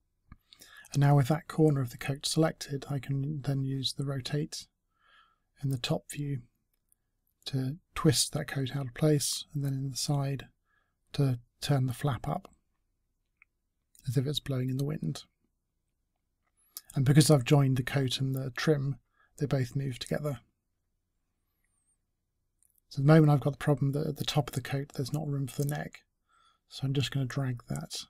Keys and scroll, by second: 1.2 e, 11.1 w, 13.5 space.